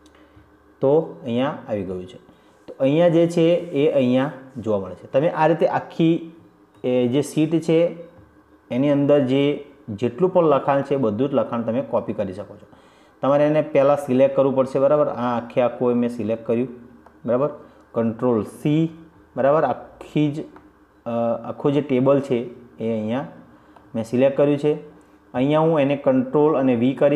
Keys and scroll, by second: 8.0 ctrl+z, 19.8 ctrl+c.